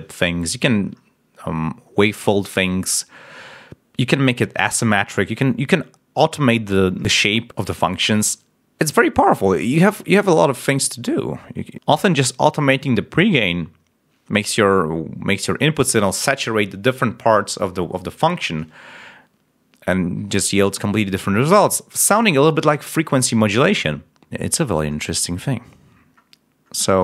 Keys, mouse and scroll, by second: 24.4-24.7 scroll up 2, 24.8 scroll down 2, 25.1-26.2 scroll up 4.